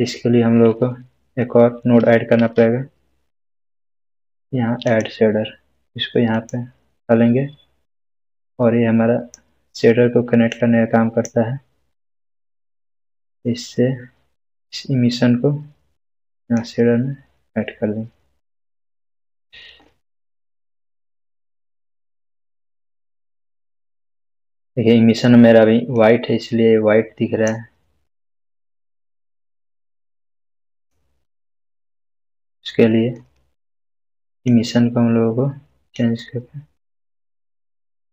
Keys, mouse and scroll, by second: 2.3 shift+a, 4.8-9.3 drag, 22.7 click, 22.8-23.7 scroll down 1, 25.9-27.5 drag, 31.3-32.4 scroll up 1, 32.4-33.4 middle click, 34.3-38.1 drag.